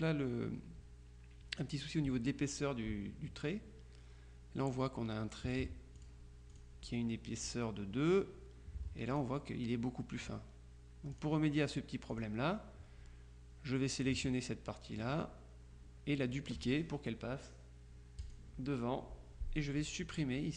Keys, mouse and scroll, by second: 6.1 click, 9.3 click, 11.3 click, 12.2 click, 18.3 click.